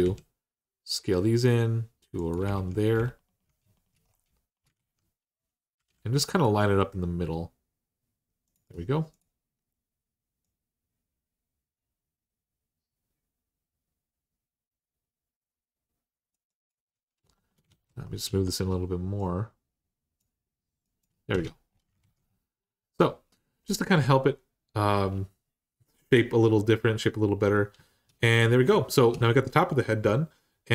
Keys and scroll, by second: 2.3 alt+z, 4.5 alt+z, 5.6 g, 17.5 ctrl+z, 21.1 Tab, 21.8 alt+z.